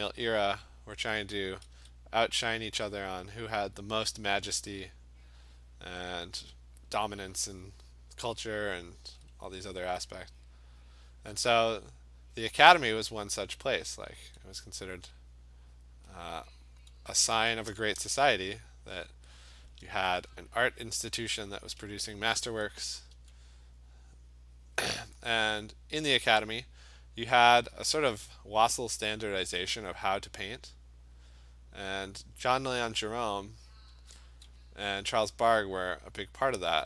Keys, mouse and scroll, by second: 0.0 click, 0.2 click, 0.4 click, 1.5 [, 1.8 [, 2.4 click, 3.0 click, 3.6 click, 4.9 click, 5.4 click, 5.6 click, 8.0 click, 8.4 click, 9.1 [, 9.4 [, 10.1 click, 10.5 click, 10.9 click, 11.2 click, 11.4 click, 12.0 click, 12.5 click, 12.9 click, 13.4 click, 13.8 click, 14.2 click, 14.9 alt+click, 15.4 click, 16.5 click, 17.6 alt+click, 17.7 ], 18.0 ], 18.2 ], 18.5 click, 19.0 click, 21.7 alt+click, 22.0 [, 22.3 [, 22.5 [, 23.2 [, 24.8 click, 25.5 click, 26.2 click, 26.7 alt+click, 27.7 alt+click, 27.8 alt+click, 28.7 click, 29.2 alt+click, 29.5 ], 29.7 ], 30.9 click, 31.3 click, 31.9 click, 32.4 click, 32.7 click, 32.8 click, 33.7 alt+click, 33.7 click, 33.9 [.